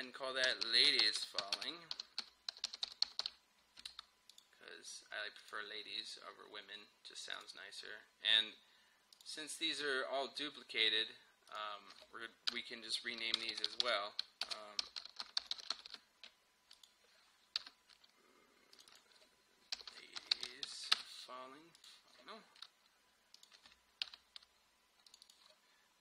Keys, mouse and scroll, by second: 0.3-3.8 typing, 4.3 click, 11.5 click, 12.5 Return, 13.0 ▶, 13.4 BackSpace, 14.5-16.2 typing, 16.8 click, 17.6 Return, 18.8 click, 19.6-21.2 typing, 21.8 click, 24.1 Return, 25.1 click.